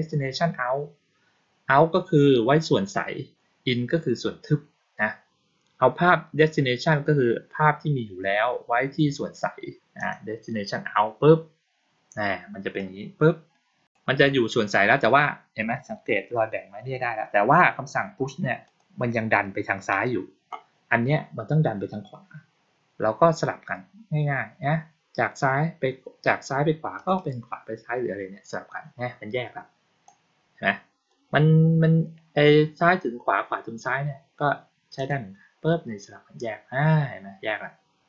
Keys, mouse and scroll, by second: 9.8 click, 12.6-13.7 drag, 18.5 click, 26.8 click, 27.0 click, 29.9-30.9 drag, 34.8 click.